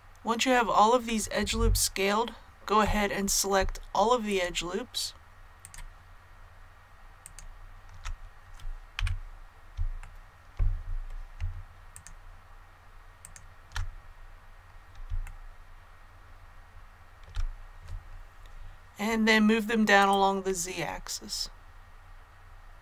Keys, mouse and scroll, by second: 1.5-2.8 scroll up 1, 4.2 alt+shift+right click, 7.2 alt+shift+right click, 7.2-7.8 scroll down 1, 7.9 alt+shift+scroll down 1, 8.9 KP_1, 10.0 shift+middle click, 11.9 alt+shift+right click, 13.9-14.4 scroll down 1, 15.2 shift+middle click, 20.0-22.8 drag.